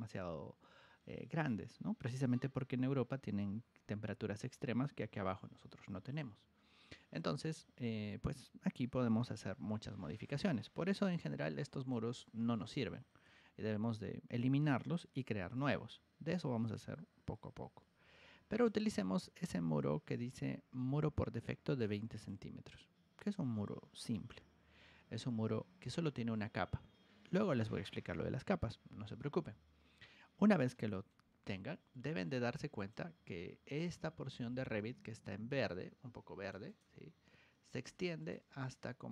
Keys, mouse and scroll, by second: 11.0 r, 11.6 click, 12.1 click, 13.2 Escape, 18.4 click, 22.0 click, 31.8 ctrl+1, 32.7 click, 33.8-36.4 drag, 36.6 right click, 38.1 click.